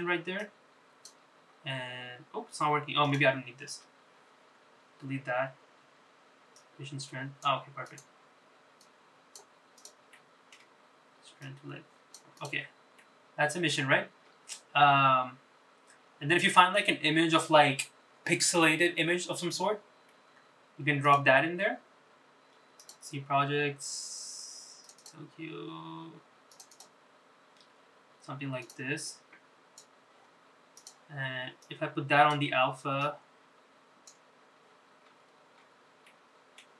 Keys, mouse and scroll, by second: 0.8-6.3 middle drag, 7.2 middle click, 9.9 shift+click, 11.1 click, 12.1 click, 12.7 click, 31.4 click, 35.8 click.